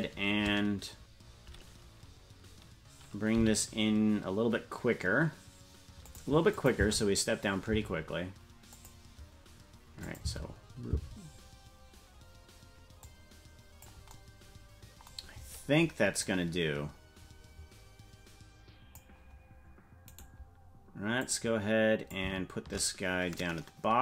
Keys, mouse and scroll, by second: 3.4 g, 6.5 click, 6.7 space, 8.7 click, 10.0 click, 10.2 space, 12.7 space, 13.0 click, 16.2-19.0 drag, 20.2 right click, 21.2-22.2 drag, 23.4-24.0 drag.